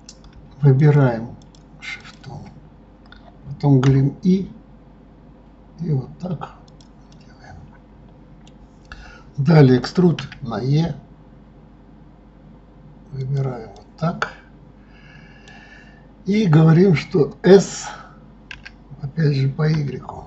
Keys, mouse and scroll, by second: 0.8 shift+click, 1.4 shift+click, 2.0 shift+click, 7.1-10.1 middle drag, 13.7-16.7 middle drag.